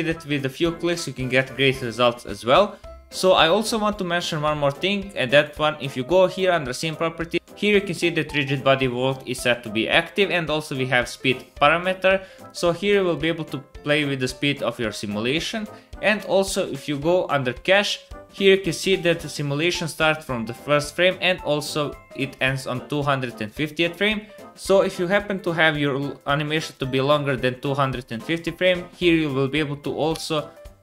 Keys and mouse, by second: 5.1 middle click, 5.3 middle click, 5.5-13.2 middle drag, 13.2-16.3 drag, 16.3-26.1 middle drag, 26.4 click, 26.4 middle click, 26.4 right click, 27.0-30.3 drag, 27.0-30.3 middle drag, 27.0-30.3 right drag, 30.4 middle click.